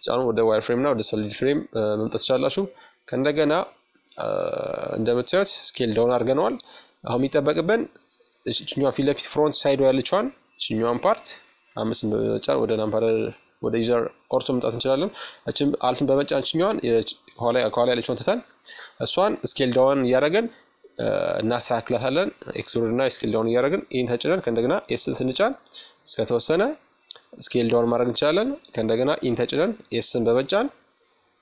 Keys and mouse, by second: 2.5-4.8 middle drag, 6.0-7.9 right drag, 7.0 KP_1, 9.2 KP_5, 12.4-15.6 right drag, 14.7-17.7 middle drag, 19.9-21.7 middle drag, 21.5 e, 24.5-26.1 middle drag, 30.0-31.4 drag.